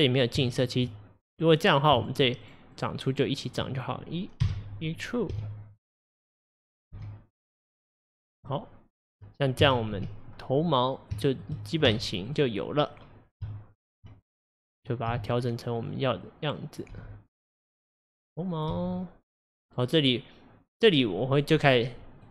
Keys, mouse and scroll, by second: 0.5 ctrl+click, 1.5 click, 2.0 shift+click, 2.5 shift+click, 2.8 shift+click, 3.1 shift+click, 3.4 shift+click, 4.5 e, 8.5-9.7 middle drag, 9.7 KP_1, 10.6-11.2 scroll up 1, 11.2 scroll up 3, 11.2-12.3 shift+middle drag, 12.3 click, 13.5 1, 14.0 1, 14.1 1, 14.3 click, 15.1 g, 16.3 click, 17.0 g, 18.0 click, 18.8 g, 21.6 click.